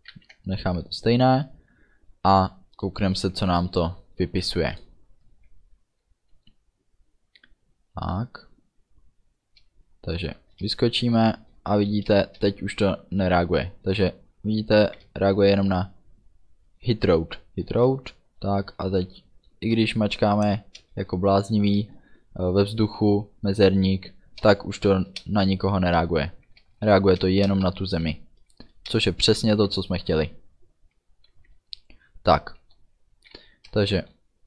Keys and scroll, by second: 0.2 ctrl+s, 10.5 space, 14.6 d, 17.8 space, 24.1 a, 24.6 space, 26.5 a, 26.8 space, 29.7 d, 31.2 space, 31.4 d, 33.4 a, 33.8 space.